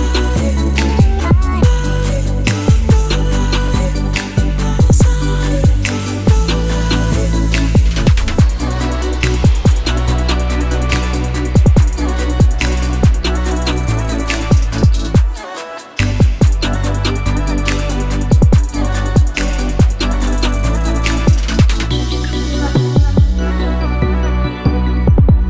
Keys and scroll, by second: 6.0-8.1 typing, 8.8 shift+Return, 9.7 Return, 19.9-22.9 typing.